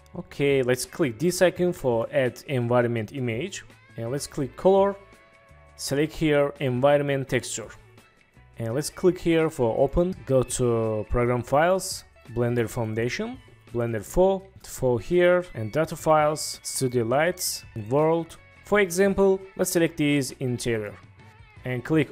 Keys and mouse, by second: 2.0 click, 4.4-7.5 drag, 9.9 click.